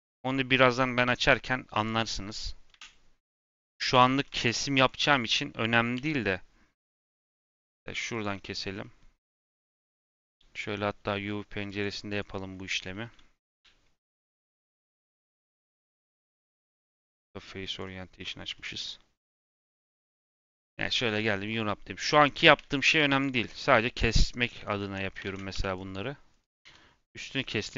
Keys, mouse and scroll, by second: 1.7 click, 2.6 KP_Decimal, 3.2-3.6 scroll down 5, 3.6 Tab, 3.8 3, 4.7 click, 5.9 2, 6.2-8.0 middle drag, 8.0 click, 8.7-11.7 middle drag, 11.7 click, 13.0-14.3 middle drag, 14.3 z, 15.1 Tab, 16.5-18.1 drag, 18.1-18.5 scroll up 2, 18.5-19.6 middle drag, 19.6 Tab, 19.9 a, 20.6 u, 21.2-21.7 scroll up 2, 22.5 Tab, 22.8 h, 23.1 click, 23.4 Tab, 23.5 scroll up 2, 24.0-24.6 scroll down 2, 25.4 3, 25.7 click, 26.6 2, 27.0 click.